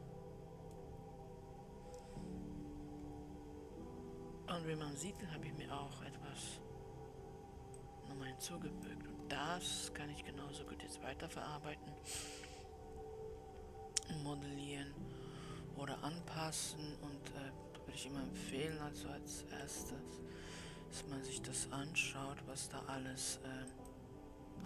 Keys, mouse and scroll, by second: 5.7-9.5 drag, 11.6 middle click, 12.0-13.1 scroll up 3, 13.1-16.5 middle drag.